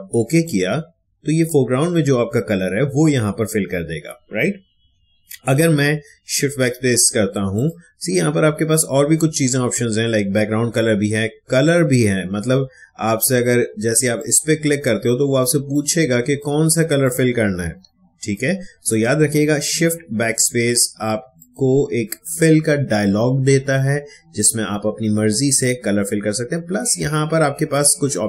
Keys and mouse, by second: 0.2 click, 4.8 click, 5.0 ctrl+z, 6.0 shift+BackSpace, 7.5 click, 14.1-18.8 drag, 21.3 click.